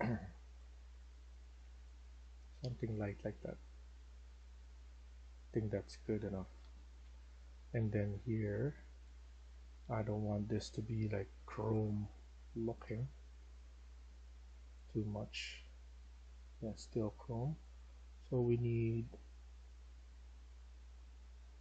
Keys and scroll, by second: 2.9-9.8 typing.